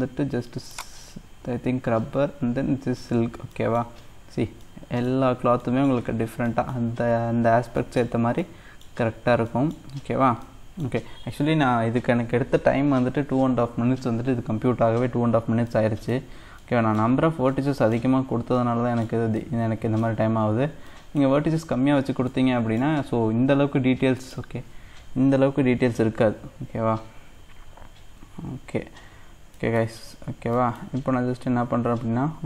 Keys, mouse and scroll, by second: 0.8-3.1 drag, 3.1-3.6 scroll down 2, 3.6 middle click, 3.8 scroll up 1, 4.0-4.6 scroll down 1, 4.6 middle click, 5.1-5.6 scroll up 1, 5.6 middle click, 6.1-6.5 scroll down 1, 6.5 middle click, 7.0-7.6 scroll up 1, 7.6 scroll up 1, 7.8-9.0 middle drag, 9.0-9.4 scroll up 2, 9.4 middle click, 10.0-10.5 scroll down 1, 10.5-13.6 middle drag, 15.1-15.6 scroll up 2, 15.6 scroll down 1, 15.7 middle click, 16.3-16.6 scroll up 1, 16.6 middle click, 17.3 scroll down 2, 17.5 middle click, 18.1-18.6 scroll up 1, 18.6 middle click, 19.2 scroll down 1, 19.3-20.5 middle drag, 20.5-20.9 scroll down 2, 20.9 middle click, 21.5-22.3 scroll up 5, 22.3-23.6 middle drag, 23.6-27.3 scroll up 14, 24.2 middle click, 27.3-28.9 scroll down 1, 28.9-29.6 scroll down 1, 29.6 middle click, 30.1-30.6 scroll down 1, 30.6 middle click, 31.1-32.4 scroll up 4.